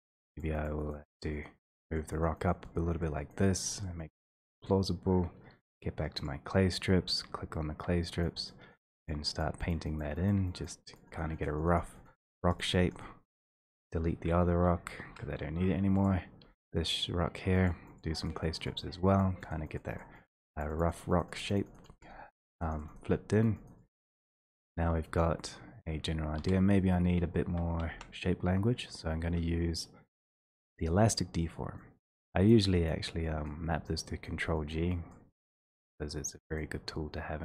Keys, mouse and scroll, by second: 0.0 click, 0.3 click, 0.4 click, 0.8 click, 1.1 click, 1.3 click, 2.0-6.3 drag, 7.3 x, 8.3 click, 8.7 click, 9.4 click, 9.8 click, 10.1 click, 10.3 click, 10.7 click, 11.0 click, 11.2 click, 11.7 click, 11.8 click, 11.9 click, 12.1 click, 12.2 click, 12.6 click, 12.8 click, 12.9 click, 13.0 click, 13.4 1, 13.8 click, 15.0 Delete, 16.1 click, 16.5 3, 17.7 click, 18.0 click, 18.4 click, 18.7 click, 18.8 click, 19.4 click, 19.6 click, 19.8 click, 20.1 click, 20.5 click, 20.7 click, 20.8 click, 21.0 click, 21.4 click, 21.5 click, 21.7 click, 21.9 click, 22.0 click, 22.2 click, 22.3 click, 22.5 click, 22.7 click, 22.9 click, 23.0 click, 23.4 click, 23.7 click, 23.9 click, 24.4 1, 25.5 click, 26.4-27.9 typing, 30.9 click, 32.9 click, 33.5 click, 34.3 click, 34.8 click, 35.2 click, 35.5 click, 36.2 click, 36.6 click.